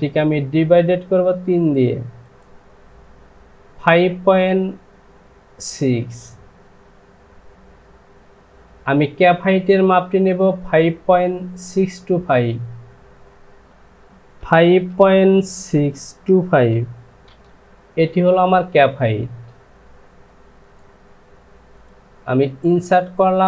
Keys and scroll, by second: 13.6 Down, 14.4 KP_5, 15.7 KP_6, 16.2 KP_2.